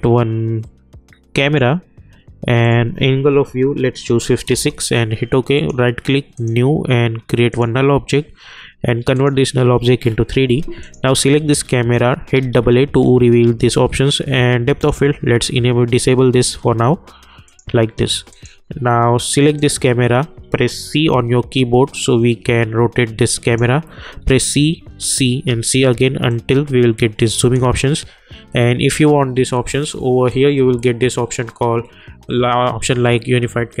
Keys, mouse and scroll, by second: 1.4 click, 4.5 Return, 5.5 right click, 6.3 click, 12.3 typing, 14.8 a, 15.0 click, 17.4 click, 20.9 c, 21.9-24.0 drag, 24.0 c, 24.9 c, 25.5 c, 26.3-30.0 drag, 30.3-33.1 drag.